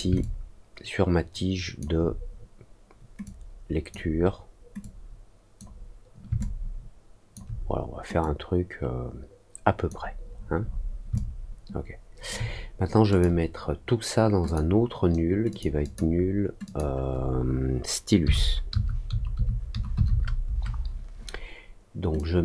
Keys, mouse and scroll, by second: 0.1-1.7 alt+drag, 3.2 click, 4.7 click, 6.3 alt+click, 8.1-9.8 drag, 10.3-10.8 scroll down 2, 11.1-12.2 alt+drag, 13.0 click, 14.4 click, 15.4 click, 15.8 click, 16.6 click, 22.1-22.4 drag.